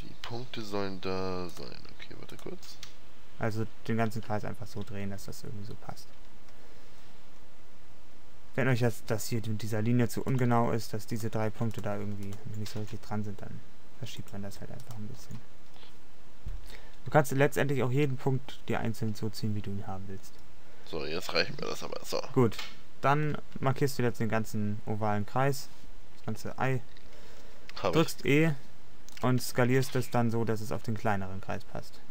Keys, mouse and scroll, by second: 1.6-4.1 middle drag, 4.1 a, 4.4 a, 10.8-12.4 middle drag, 12.8 g, 14.5 click, 15.3 g, 15.8-17.7 middle drag, 28.1 e, 29.6 middle click, 29.9 s.